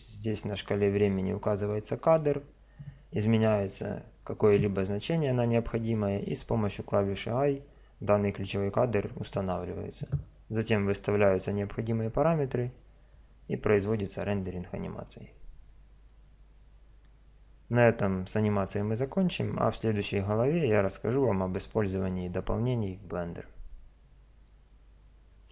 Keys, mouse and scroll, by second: 0.0-1.7 drag.